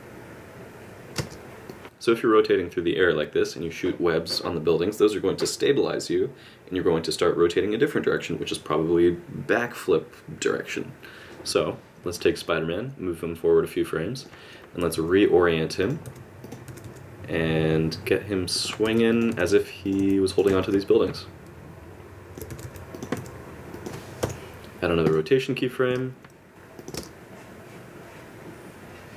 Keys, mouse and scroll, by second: 1.2 space, 1.7 middle click, 12.5 click, 14.8 r, 16.1 r, 18.8 r, 19.3 r, 20.6 middle click, 22.5 r, 23.1 r, 24.2 i, 26.5 KP_Subtract, 26.5 click, 26.8 click, 26.9 space.